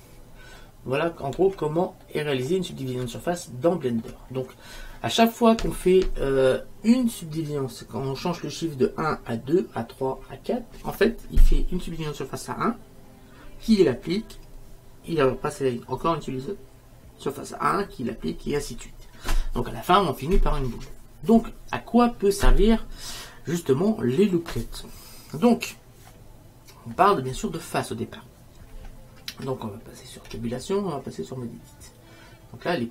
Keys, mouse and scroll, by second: 0.7-2.2 drag, 1.2-3.2 middle drag, 1.2-2.2 right drag, 3.2 click, 3.8-8.1 middle drag, 30.4 Tab.